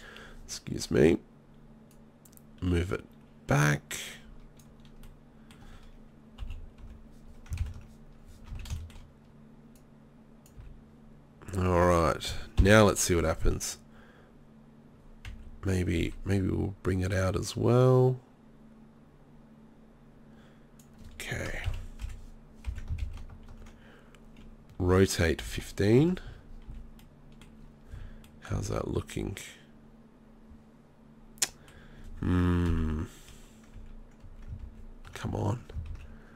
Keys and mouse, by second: 1.9-4.6 middle drag, 5.1 middle click, 5.4 middle click, 5.6 middle click, 6.4 KP_3, 6.8 KP_1, 7.6 ctrl+KP_1, 8.5 z, 10.6 z, 12.6 ctrl+l, 15.3 KP_3, 21.7 KP_3, 22.0 KP_1, 22.7 KP_1, 24.8 r, 26.4 z, 26.7 z, 27.9 z, 28.5 z, 30.3 middle click, 30.5 middle click, 30.6 middle click, 30.9 middle click, 31.8 middle click, 32.7 KP_3, 33.3 KP_1, 33.8 KP_3, 34.2 KP_1, 35.9 ctrl+z.